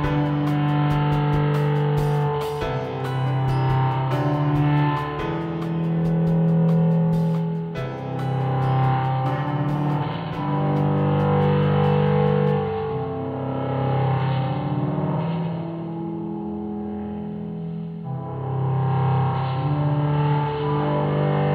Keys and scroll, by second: 2.5-3.2 typing, 6.8 Up.